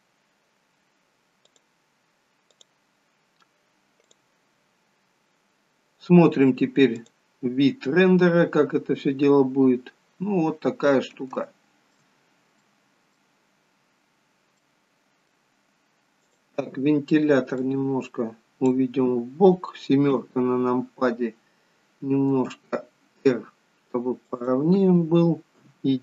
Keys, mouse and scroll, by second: 9.2 click, 9.4-10.0 scroll down 1, 10.0-11.4 scroll down 4, 11.4 shift+middle click, 12.2-13.4 scroll up 4, 12.7 middle click, 13.4-14.7 scroll down 6, 14.7 middle click, 16.3 click, 17.7 click, 20.2 KP_7, 22.3 r, 25.6 KP_1.